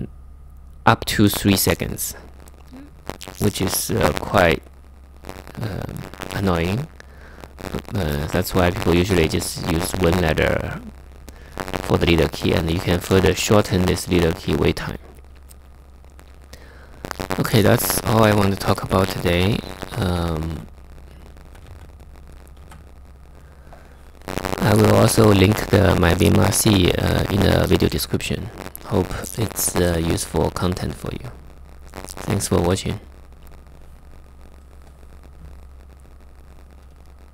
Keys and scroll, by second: 20.2 super+Tab.